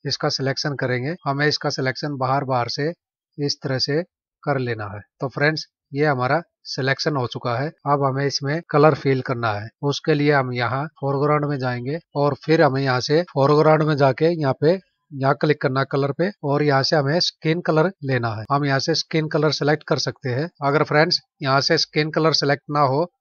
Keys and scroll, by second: 6.9 ctrl+-, 12.0 ctrl+=.